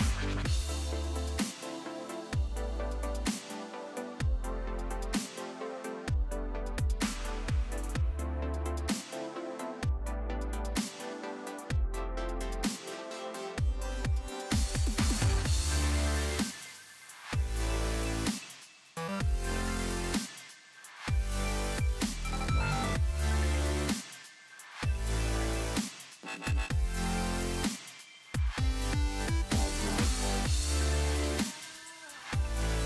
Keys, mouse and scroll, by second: 0.3 ctrl+], 1.8 ctrl+right click, 3.3 ctrl+click, 10.3 ctrl+space, 10.5 ctrl+click, 10.8 ctrl+space, 11.2 ctrl+alt+scroll down 2, 12.0 space, 12.2 click, 12.5 space, 20.1 click, 23.5-29.8 drag, 32.1 alt+scroll down 1.